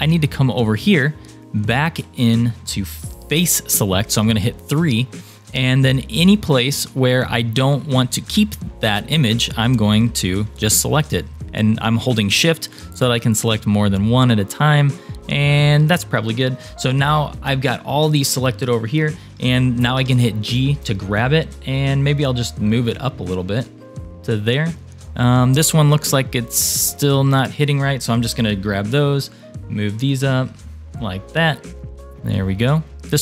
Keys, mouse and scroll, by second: 0.6-1.1 scroll down 3, 1.4-3.0 shift+middle drag, 4.2 3, 5.3 scroll up 1, 6.2 scroll down 2, 9.5 click, 11.2 shift+click, 12.0 shift+click, 12.9 shift+click, 13.4 shift+click, 14.1 shift+click, 14.9 shift+click, 15.3 shift+click, 17.4 scroll up 2, 20.0 g, 25.2 click, 26.1 shift+click, 26.9 shift+click, 28.3 g, 32.0 click.